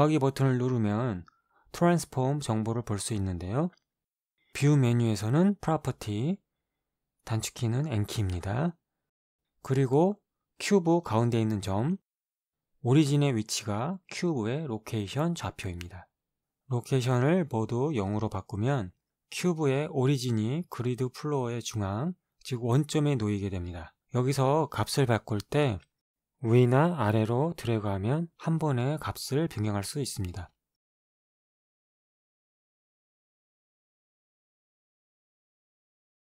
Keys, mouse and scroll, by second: 5.9 click, 8.3 click, 8.7 click, 9.4 click, 18.0 click, 18.9 KP_0, 19.4 click, 20.3 KP_0, 21.0 click, 21.9 click, 21.9 KP_0, 22.4 KP_0, 23.4 Return, 26.3-28.4 drag, 29.2 click, 29.7 KP_2, 30.0 Return, 31.7-33.0 drag, 33.0 KP_3, 33.3 Return, 34.2-36.0 drag, 36.0 KP_0.